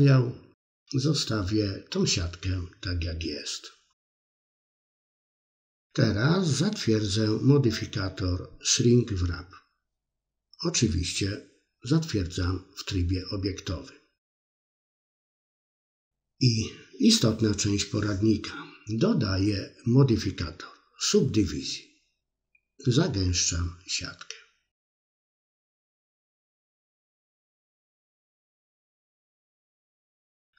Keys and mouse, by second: 1.2 KP_3, 1.4 middle drag, 1.6 shift+middle click, 1.8 middle drag, 2.1 middle click, 2.3 middle drag, 8.3 click, 8.9 Tab, 10.0 click, 11.1-11.8 middle drag, 11.9 middle click, 18.4-20.4 middle drag, 21.8 click, 23.0-27.6 middle drag.